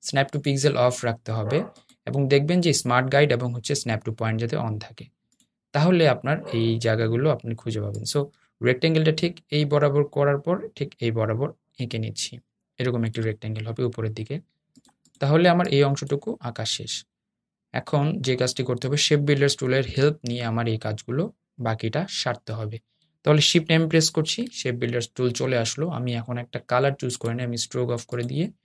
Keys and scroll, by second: 19.6 shift+m.